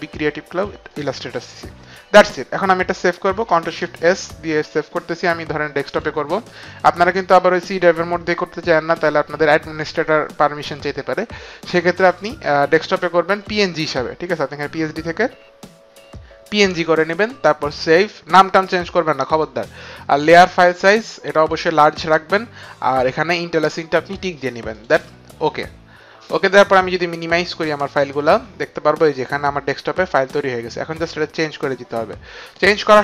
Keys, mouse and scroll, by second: 0.9 click, 4.1 ctrl+shift+s, 6.4 ctrl+shift+s, 6.4 click, 13.3 click, 16.4 click, 17.6 click, 21.4 click, 24.7 click, 26.2 click, 27.8 click.